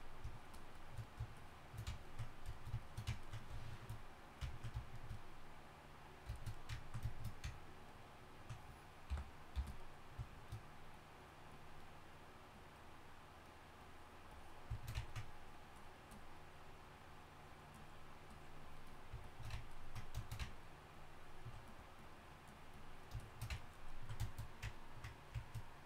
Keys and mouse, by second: 20.5-25.1 drag.